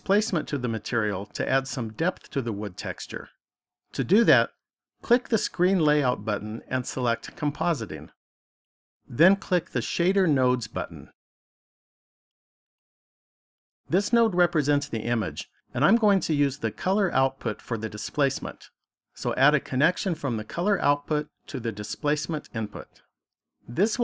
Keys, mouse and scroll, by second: 5.5 click.